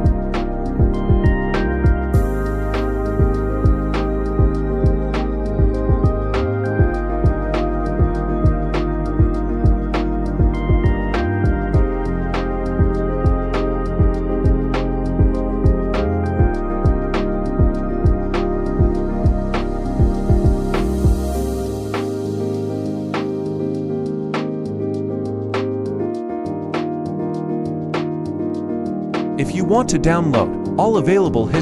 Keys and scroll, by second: 3.9 Home, 30.1 F2.